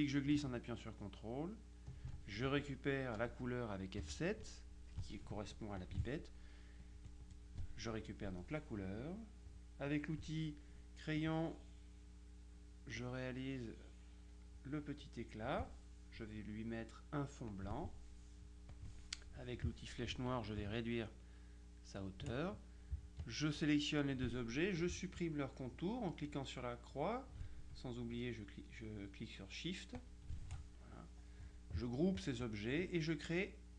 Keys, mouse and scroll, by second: 4.1 F7, 5.9 click, 6.9 click, 7.9 click, 10.0 click, 11.3-16.1 drag, 17.6 click, 18.8 click, 20.7-22.8 shift+drag, 23.3 shift+click, 30.1 shift+click, 32.3 click.